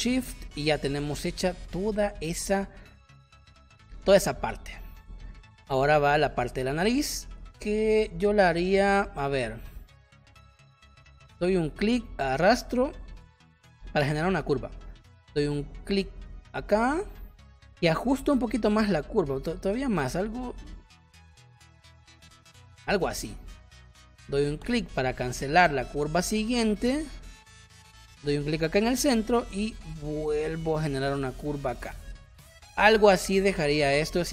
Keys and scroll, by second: 1.7 space, 4.0 space, 34.0 space.